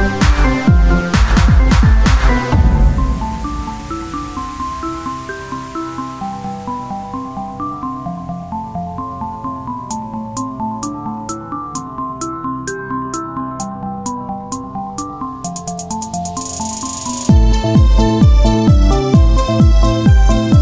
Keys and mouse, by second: 0.0 Tab, 1.6-3.8 drag, 3.8-5.8 middle drag, 6.1 Tab, 8.3 middle click, 8.9 click, 9.4 r, 11.5-12.7 drag, 12.8 Tab.